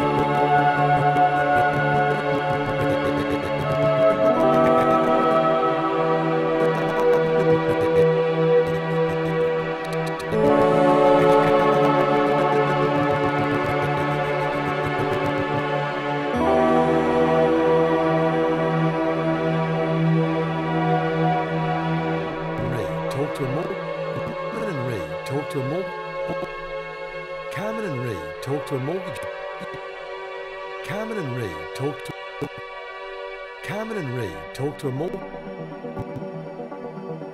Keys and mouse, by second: 15.4 click, 17.9 alt+click, 18.7 shift+click, 19.8-20.8 drag, 21.0 typing, 22.1-23.0 shift+drag, 22.6-24.5 typing, 24.1 click, 25.7-27.3 typing, 26.2-29.0 drag, 29.3-30.5 typing, 29.5 click, 32.1-33.5 typing, 32.4 click, 34.6-35.4 typing, 35.9 click, 36.6-37.3 typing.